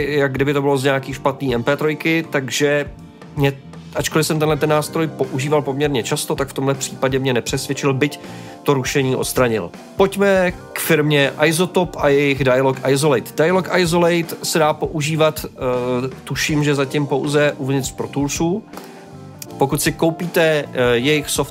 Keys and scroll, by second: 13.3 space.